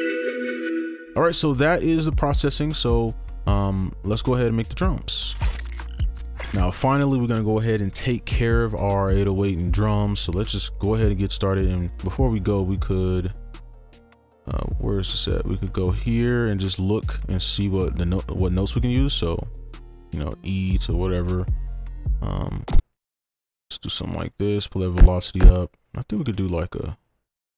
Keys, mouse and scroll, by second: 0.6 space, 10.2 right click, 15.9 scroll down 1, 16.8 ctrl+click, 17.9 right click, 19.0 ctrl+click, 19.7 right click, 23.0 ctrl+click, 23.4 ctrl+Up, 23.6-24.5 scroll up 10, 24.5 right click, 25.4 double click, 25.9 ctrl+click, 27.0 shift+click.